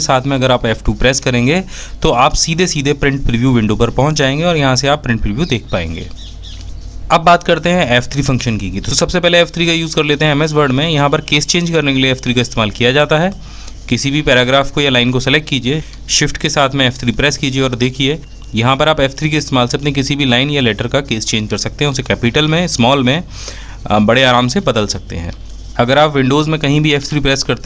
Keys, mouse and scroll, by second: 7.2 f, 7.4 F3, 14.8 shift+f, 15.0 shift+F3, 26.4 f.